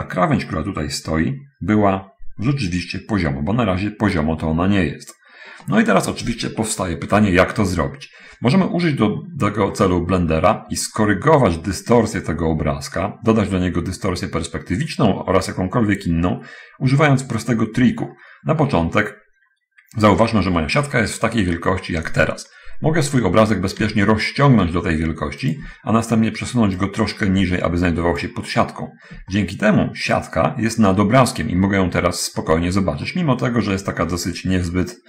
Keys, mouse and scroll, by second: 8.9-10.8 middle drag, 11.9 middle click, 18.4 scroll down 1, 21.8-23.7 middle drag, 24.1 s, 25.8 click, 27.2 click, 28.8 middle click, 29.4-33.3 middle drag, 33.4 middle click.